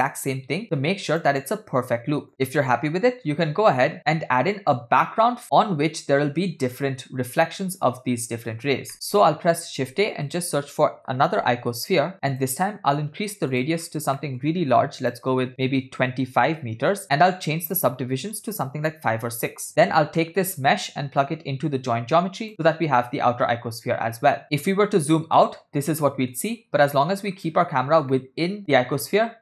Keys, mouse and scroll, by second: 1.2 click, 2.4 scroll down 6, 2.8-3.8 scroll down 6, 9.0 middle click, 9.0 scroll up 2, 9.7 shift+a, 14.0 scroll up 2, 14.4 middle click, 14.6 scroll up 1, 15.1-17.0 drag, 17.6-19.7 drag, 20.1 scroll down 2, 20.4 middle click, 21.3-22.5 drag, 24.6 middle click, 24.6 scroll down 6, 24.8 scroll down 2, 25.4-25.8 scroll down 2, 25.6-26.4 middle drag, 26.8 scroll up 2, 27.4 scroll up 5, 28.4-29.4 middle drag.